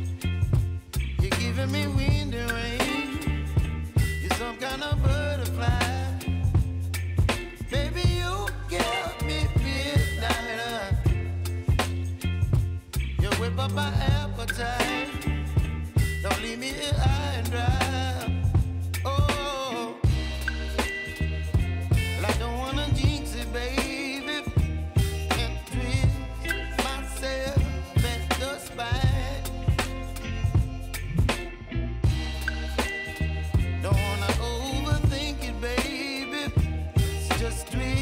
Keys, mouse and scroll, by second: 1.7 r, 2.3 click, 3.1 space, 5.5 space, 6.4 click, 9.8 ctrl+shift+c, 10.3 Return, 11.6-15.2 drag, 15.6 ctrl+d, 16.1 s, 19.6 click, 20.9 space, 24.3 space, 26.4 typing, 27.0-28.7 drag, 30.9 -, 31.1 Return, 31.9 p, 32.7-37.4 drag, 37.4 t.